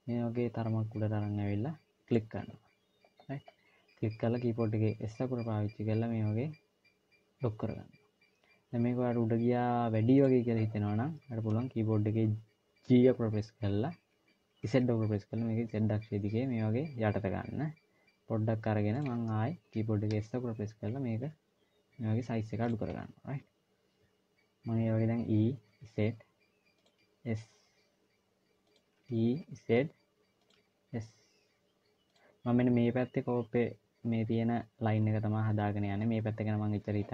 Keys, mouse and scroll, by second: 3.3-4.4 scroll up 1, 4.8 s, 12.7 g, 19.9 s, 24.7 e, 26.8 s, 28.7 e, 30.4 s.